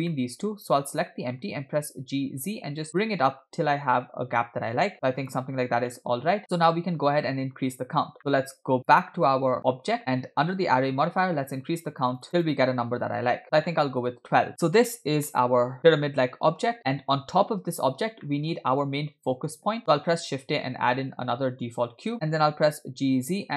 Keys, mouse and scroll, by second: 0.2 shift+middle click, 0.5-1.0 scroll up 2, 1.0 click, 1.8 g, 5.5-6.0 scroll down 2, 6.0-7.7 middle drag, 7.8-8.1 scroll down 2, 8.2 middle click, 8.8-10.0 drag, 10.1-10.5 scroll down 3, 11.9 click, 12.3 click, 13.3 click, 13.7-14.5 middle drag, 15.4-17.0 middle drag, 18.2-18.6 shift+middle drag, 20.1 shift+a, 22.7 g.